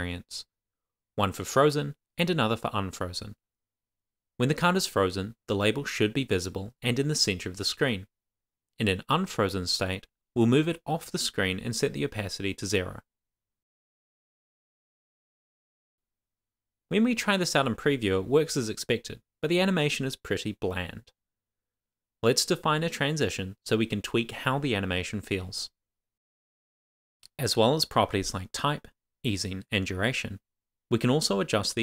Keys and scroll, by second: 0.8 Return, 1.1 shift+;, 1.6 shift+5, 1.7 shift+Left, 2.0 shift+', 2.2 Down, 3.2 super+c, 3.6 super+v, 4.2 super+s, 5.6 Up, 5.7 Right, 6.3 super+s, 8.2 Return, 8.9-11.3 typing, 9.8 Tab, 11.1 Right, 12.0 super+s, 12.4 Right, 12.7 super+s, 26.3 Return, 26.9-28.1 typing, 27.0 Return, 28.1 Return, 28.3 Down, 28.8 Return, 29.4 shift+;, 29.4 shift+space, 29.5 shift+[, 29.6 Return, 29.9 Up, 30.6 Tab.